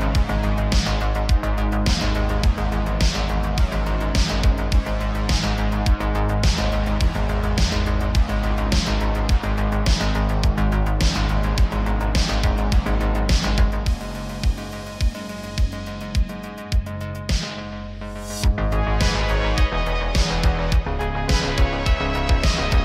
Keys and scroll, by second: 0.7 Tab, 1.0 s, 1.4 shift+z, 2.7 Tab, 4.4 Tab, 4.8 2, 5.7 2, 7.5 Tab, 10.5 ctrl+j, 11.0 Tab, 11.3 a, 11.9 m, 13.3 1, 13.7 g, 15.4 g, 18.8 2, 19.6 g, 19.7 g, 20.8 Tab.